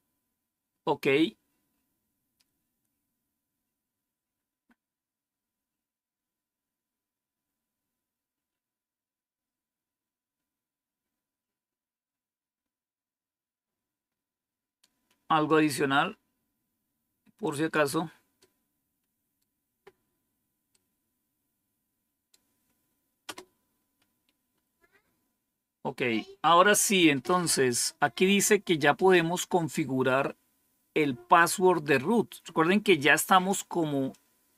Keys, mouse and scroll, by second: 1.4-2.3 scroll down 6, 4.5-6.1 scroll up 2, 6.1 scroll down 2, 15.3-17.6 drag, 18.3-19.3 right drag, 20.6-22.2 right drag, 23.1 Return, 24.7 scroll down 1, 25.8 scroll down 1, 34.0-34.5 drag.